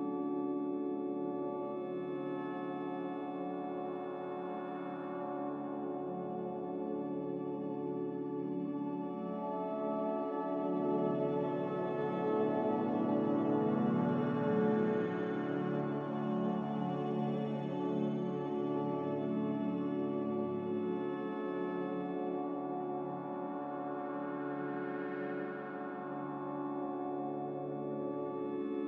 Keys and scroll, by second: 10.2 n.